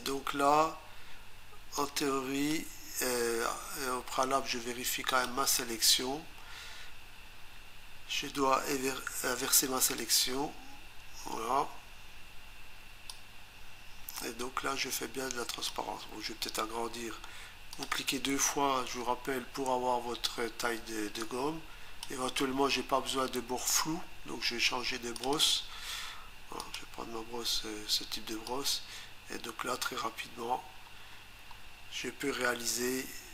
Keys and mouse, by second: 1.8 click, 5.1 click, 10.0 click, 11.0 Return, 13.1 click, 17.7 click, 18.0 click, 18.1 double click, 21.3 click, 25.2 click, 25.4 click, 25.5 double click, 26.6 click, 28.5 click.